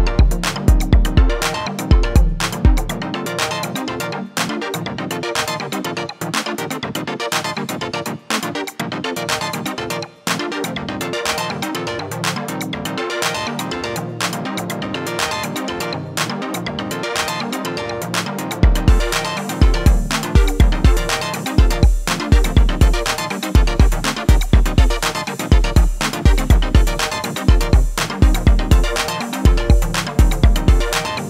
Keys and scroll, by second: 24.1 Tab.